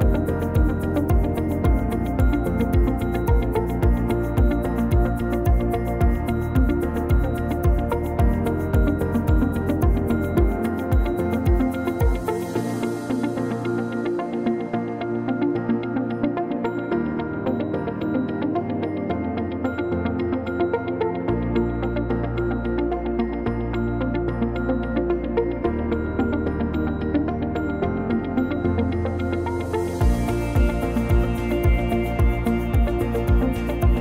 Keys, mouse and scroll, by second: 1.0 shift+r, 4.1 Tab, 5.2 q, 7.2 ctrl+r, 9.3 click, 10.9 ctrl+r, 12.6 click, 14.6 click, 15.0 click, 15.8 shift+click, 17.7 f, 19.7 click, 20.3 click, 23.0 click, 23.5 click, 23.8 click, 24.2 click, 25.7 Delete, 28.9 middle click, 29.6 a, 30.4 click, 31.2 shift+middle click, 32.5 click, 32.9 shift+middle click.